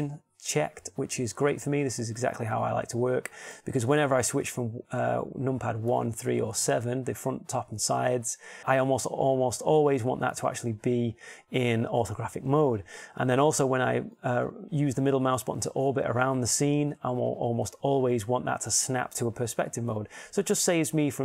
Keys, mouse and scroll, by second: 5.0 KP_1, 6.6 KP_3, 7.2 KP_7, 15.0 middle click, 15.4-17.2 drag.